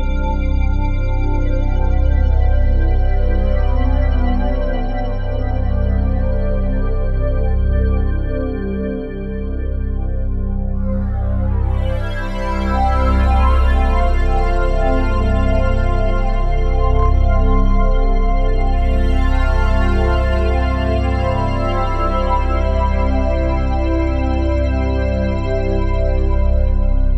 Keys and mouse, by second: 0.1-3.6 drag, 3.6 typing, 5.6 click, 8.0 typing, 9.7 click, 10.3 alt+shift+click, 10.8-12.1 alt+drag, 13.1 typing, 16.0 click, 16.9 click, 17.7 click, 18.7 e, 19.4 click, 20.0 e, 20.7 click, 21.4 click, 21.9 e, 22.4 click, 22.7 e, 23.8 click, 24.7 click, 25.4 click, 26.8 click.